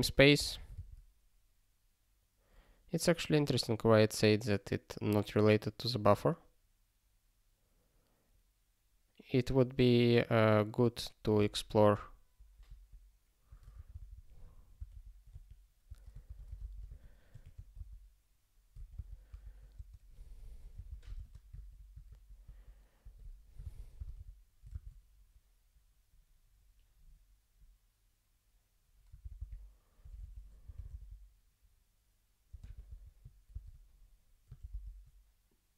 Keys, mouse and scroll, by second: 12.3 ctrl+k, 12.6 ctrl+a, 13.8 ctrl+n, 13.9 ctrl+n, 14.0 ctrl+n, 14.7 Return, 14.9 ctrl+p, 15.2-18.2 typing, 18.7 ctrl+a, 18.9 Return, 19.3 ctrl+e, 19.7-22.4 typing, 22.0 ctrl+k, 23.0 ctrl+k, 23.6 super+b, 27.0 scroll up 1, 29.1 super+b, 34.6 ctrl+k.